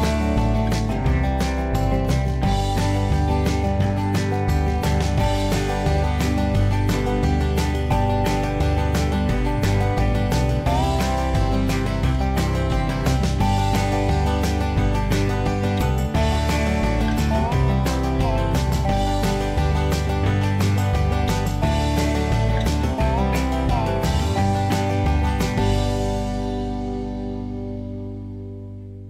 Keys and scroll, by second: 16.8 b, 22.9 b, 24.5 Escape, 24.6 Escape, 24.9 b, 26.6 b.